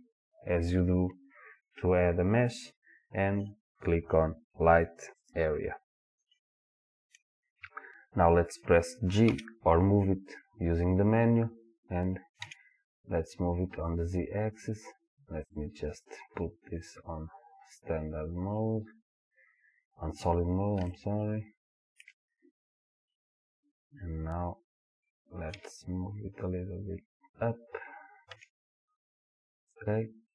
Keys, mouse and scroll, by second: 6.4-14.0 middle drag, 9.3 g, 14.0 click, 15.6-17.5 drag, 21.0-29.8 shift+middle drag, 23.5-25.6 scroll up 2, 25.6 g, 29.8 click.